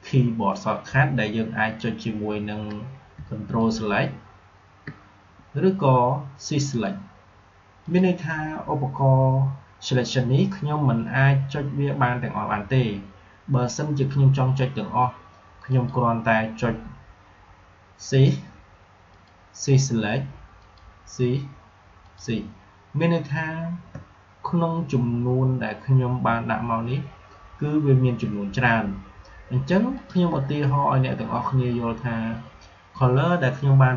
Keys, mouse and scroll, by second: 3.1 ctrl+Num_Lock, 3.5 ctrl+click, 15.6 click, 19.0 shift+click.